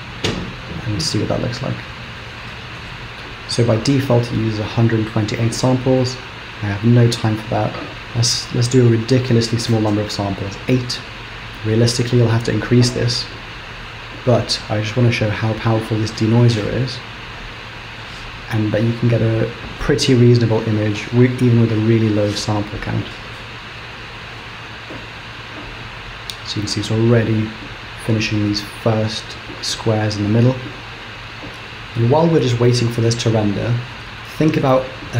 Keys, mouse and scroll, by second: 3.0 click, 5.7 click, 11.4 click, 17.3 click.